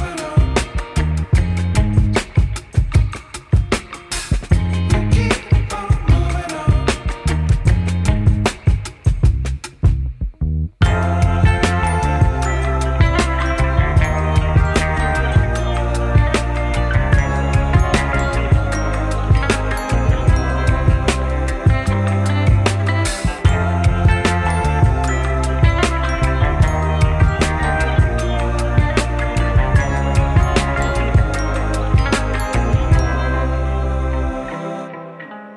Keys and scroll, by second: 0.1 alt+c, 5.1 1, 5.3 F4, 6.5 F4, 12.5 2, 12.9 ctrl+r, 13.5 ctrl+c, 15.2 F4, 18.7 2, 20.9 F4, 23.7 F4, 25.6 1, 25.7 F3, 26.7 F3, 26.8 1, 29.1 F4, 30.3-31.4 typing, 31.5 F3, 32.4 F3, 33.5 F3, 33.7 1, 34.1 F3, 35.0 1.